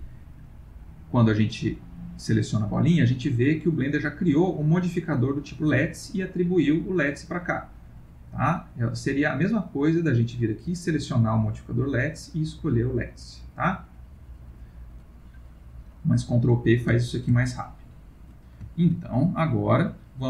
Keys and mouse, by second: 0.5 click, 1.7 click, 8.5 click, 12.0 click, 14.2 click, 15.2 middle click, 17.0 ctrl+middle click, 17.5 middle click, 18.2 middle click, 18.7 ctrl+middle click, 19.0 ctrl+middle click, 19.8 middle click.